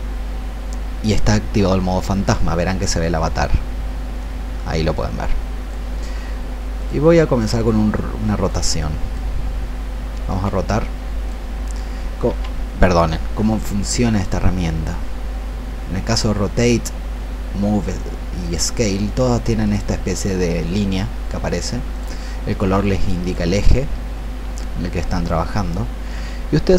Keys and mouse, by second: 10.3 click, 12.3 ctrl+z, 18.8 click.